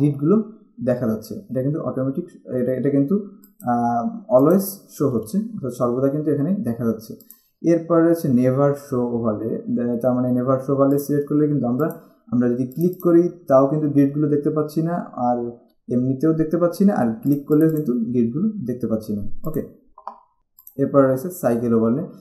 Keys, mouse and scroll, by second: 3.6 click, 7.5 click, 11.1 click, 17.5 click, 19.7 click, 20.4 z, 20.8 click.